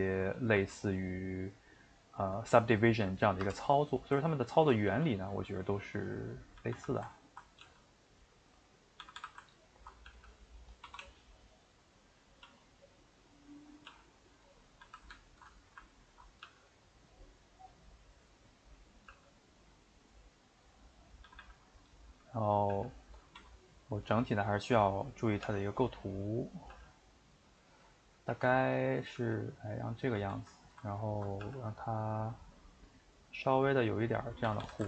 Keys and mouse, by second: 0.4 Left, 0.6 g, 2.1 click, 2.2 g, 3.7 middle click, 4.6 ctrl+Right, 4.9 g, 6.5 a, 6.7 a, 7.3 ctrl+Right, 7.6 g, 9.0 a, 9.1 a, 9.8 ctrl+Right, 10.1 g, 12.4 s, 13.5 middle click, 13.9 g, 14.7 a, 14.8 a, 16.1 ctrl+Right, 16.4 g, 17.4-18.8 middle drag, 18.8 click, 19.1 g, 21.2 a, 21.4 a, 21.7 middle click, 22.2 a, 22.7 g, 24.3-25.4 middle drag, 25.4 g, 26.0 middle click, 26.7 g, 27.8 middle click, 28.3 r, 29.2 g, 30.0 middle click, 30.1 a, 30.3 a, 31.1 ctrl+Right, 31.4 g, 34.4 a, 34.6 a.